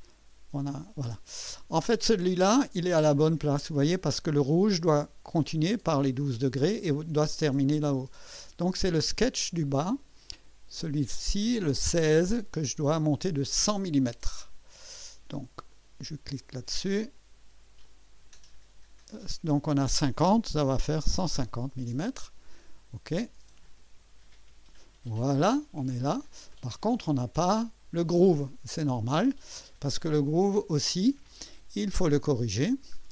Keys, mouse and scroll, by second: 1.4-2.0 drag, 2.8-4.0 drag, 4.1 scroll up 1, 8.2 scroll down 2, 8.8-10.2 drag, 11.8 click, 15.7 click, 16.4 click, 17.8 click, 20.3-21.7 typing, 23.6 click, 24.8-26.3 drag, 26.5 click, 27.3 typing, 30.4 click, 32.7 scroll down 2.